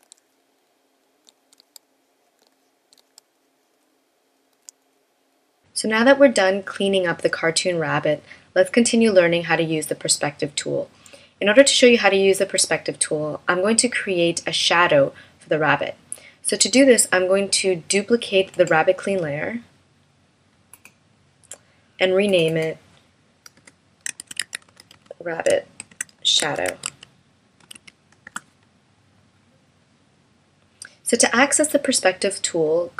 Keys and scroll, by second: 1.6 space, 3.0 space, 28.2 Return.